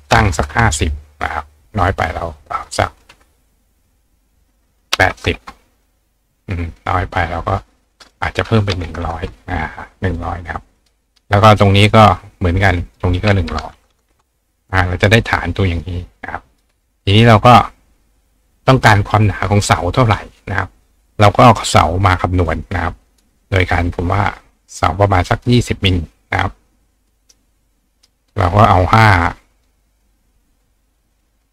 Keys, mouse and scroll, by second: 2.5 click, 7.9 click, 10.8 click, 11.2 click, 12.8 click, 15.7 click, 16.5 click, 17.2 click, 23.1 click, 25.3 click, 26.7-28.1 drag, 27.1 right click, 31.2 click.